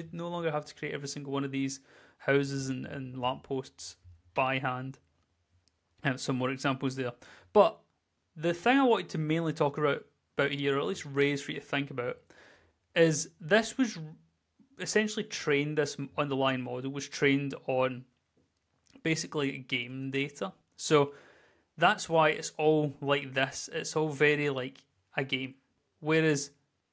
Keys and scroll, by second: 2.8-3.9 typing, 5.9 d, 6.4 w, 6.9 z, 8.2 w, 15.9 w, 18.8 w, 18.9 space, 20.2-21.2 typing, 22.8 d, 23.3 a, 24.5 w, 26.7 w.